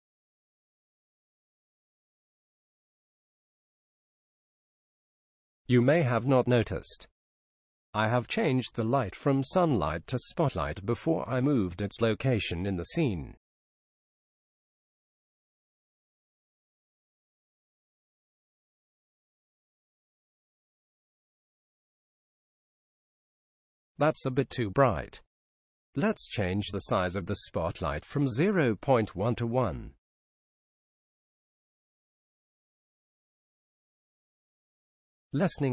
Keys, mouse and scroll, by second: 0.6 KP_1, 2.9 g, 8.0 KP_3, 10.3 KP_7, 12.4-13.4 scroll up 1, 13.4-13.8 scroll up 1, 14.8 scroll up 1, 15.5 middle click, 15.7 middle click, 16.0 middle click, 19.8-21.4 drag, 28.0-29.6 drag.